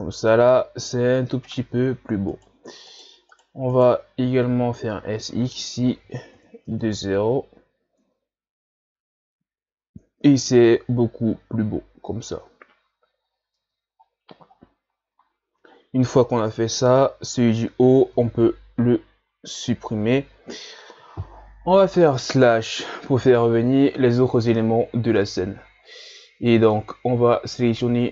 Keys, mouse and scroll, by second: 0.9 scroll up 1, 1.5 right click, 2.3 shift+right click, 2.9 shift+right click, 3.3 shift+right click, 3.7 shift+right click, 5.1 s, 6.7 Tab, 7.6 scroll down 2, 8.0 Tab, 9.9-10.5 scroll up 1, 10.5-11.8 scroll up 5, 12.0 scroll up 1, 13.2 scroll down 4, 13.6 Tab, 14.3 a, 14.6 scroll down 1, 15.7 shift+scroll up 6, 16.3 right click, 19.5 Delete, 22.7 KP_Divide, 24.1-24.6 middle drag, 24.6 scroll up 5, 25.2-27.6 middle drag, 27.6 shift+right click.